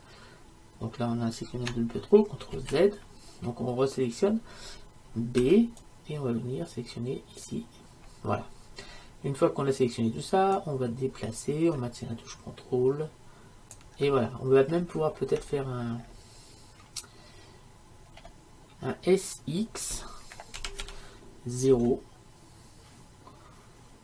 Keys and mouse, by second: 2.6 ctrl+z, 5.5 b, 18.3-20.7 middle drag, 20.7 s.